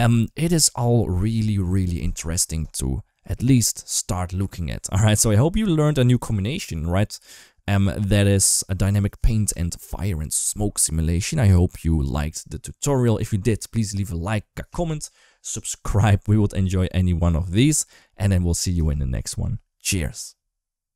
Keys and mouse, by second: 2.5 ctrl+s.